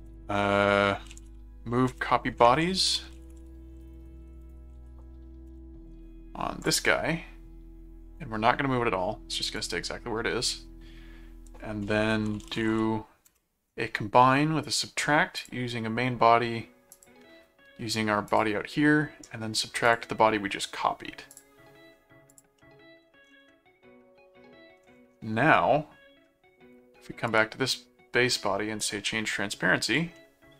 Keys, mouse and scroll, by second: 0.1-5.3 typing, 1.9 Return, 5.5 Return, 6.6 click, 9.6 click, 11.9-13.2 typing, 13.3 Return, 14.6 click, 15.4 click, 16.9 click, 18.3 click, 19.8 click, 21.3 click, 22.3 click, 22.5 middle click, 23.5-24.8 middle drag, 27.3 right click, 28.8 click, 29.8 click, 30.1 middle click.